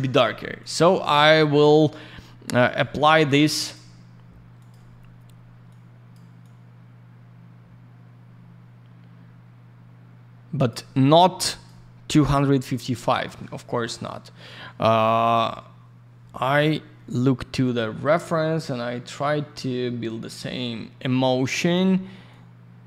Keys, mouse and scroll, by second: 0.6 click, 2.4 click, 2.5 click, 2.6 click, 2.7 double click, 3.1 click, 3.2 click, 3.5 click, 3.7 double click, 4.5 click, 4.6 click, 5.6 click, 6.4 click, 11.4 click, 12.6 click, 17.1 click, 22.2 click.